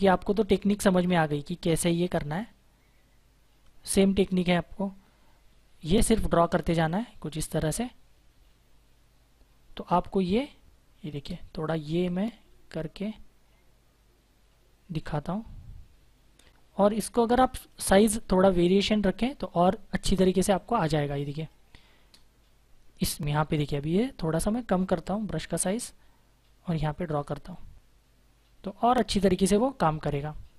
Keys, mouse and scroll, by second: 5.7 space, 6.7 click, 7.9 space, 11.9 click, 20.2 space, 20.4 click, 20.6 space, 23.6-24.0 typing, 25.0 click.